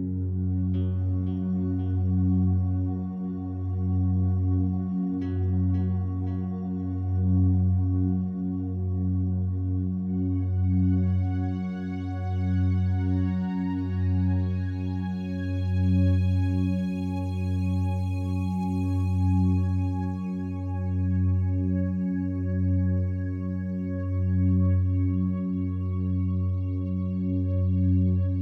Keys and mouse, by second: 0.8 Tab, 2.5 click, 5.9 e, 7.1 click, 7.4 e, 8.2 click, 8.9 click, 8.9 typing, 10.1 e, 11.1 click, 11.1 typing, 12.3 click, 13.7 Tab, 15.0 click, 15.6 click, 16.3 click, 17.1 g, 17.9 Escape, 18.7 click, 19.8 click, 20.3 click, 21.0 click, 25.1 click, 27.5 click.